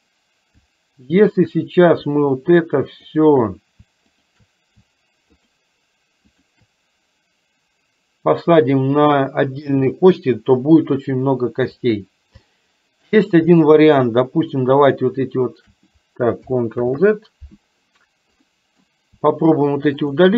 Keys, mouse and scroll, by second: 3.0 shift+click, 5.4 shift+click, 6.5 shift+click, 12.5 shift+middle click, 14.6 shift+click, 16.9 ctrl+z, 18.5 middle click, 20.2 shift+click.